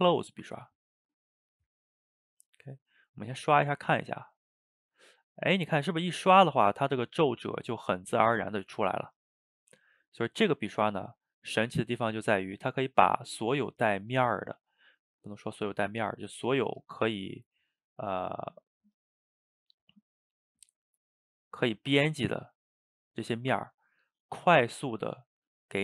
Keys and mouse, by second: 0.1-3.2 drag, 3.7-5.1 drag, 5.1-6.4 middle drag, 6.4 ctrl+z, 6.6 shift+middle click, 7.2-8.7 drag, 8.7 ctrl+z, 9.0 ctrl+middle click, 9.7 f, 10.5 middle click, 10.9 shift+f, 12.1-14.6 middle drag, 14.6-16.6 drag, 16.6 f, 17.1-20.1 drag, 20.1 middle click, 20.5-23.7 drag, 23.7 middle click, 24.7-25.8 drag.